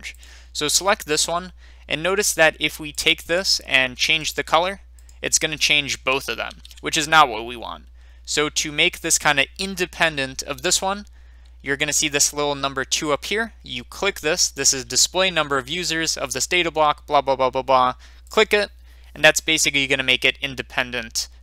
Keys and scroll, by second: 6.4 ctrl+z.